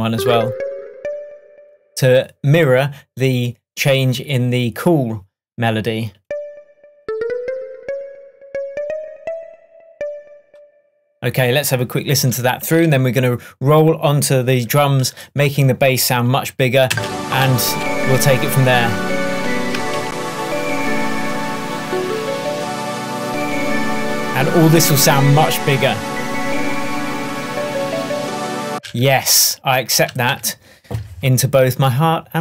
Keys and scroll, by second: 16.9 space, 20.0 super+s, 28.8 space, 30.4 super+s.